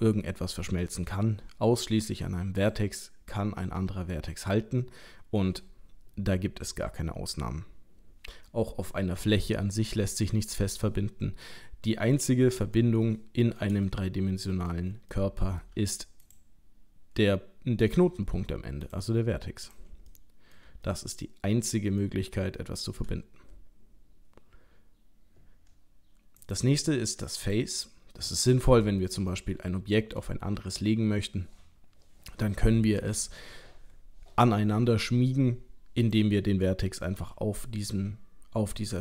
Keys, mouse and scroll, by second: 2.6 click, 9.4 middle click, 10.5 scroll up 1, 10.8-11.5 scroll down 3, 11.5 middle click, 12.2 middle click, 12.4 middle click, 13.1 shift+middle click, 13.5 middle click, 13.9 middle click, 15.1 shift+middle click, 16.3 click, 17.8 click, 18.8 click, 19.6 click, 20.1 shift+middle click, 20.9 middle click, 22.6 shift+middle click, 26.4 click, 28.4 middle click, 29.4 shift+middle click, 29.8 middle click, 36.0 click, 36.7 middle click, 37.0 g.